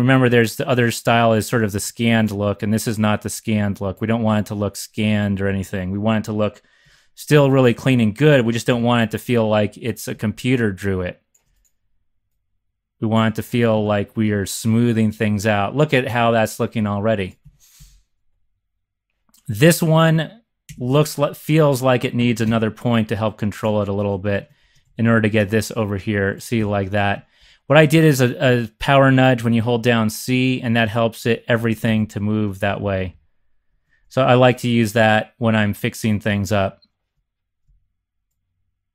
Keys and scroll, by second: 5.0 z, 5.4 z, 6.8 3, 8.8 1, 13.7 x, 17.4 x, 17.7 x, 20.6 3, 22.6 1, 24.6 c, 24.8 Left, 26.6 x, 27.4 z, 31.5 c, 31.8 shift+Left, 32.5 Right, 32.7 Right, 32.8 Right.